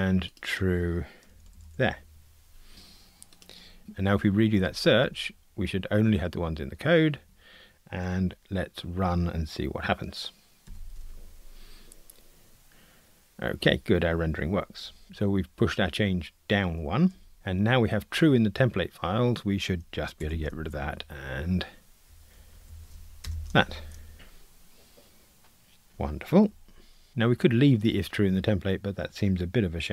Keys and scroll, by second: 4.6 shift+super+f, 10.7 ctrl+r, 20.2 super+BackSpace, 24.1 ctrl+r.